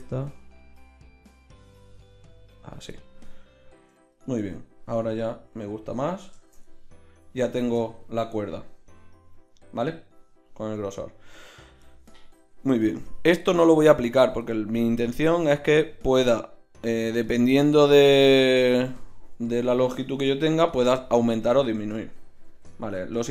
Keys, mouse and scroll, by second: 0.0 middle click, 1.5-3.1 middle drag, 3.8 KP_1, 4.4 Tab, 5.8 KP_1, 9.8 middle click, 12.8-20.8 drag, 21.9 middle click, 22.1 middle drag, 22.4-22.8 middle drag.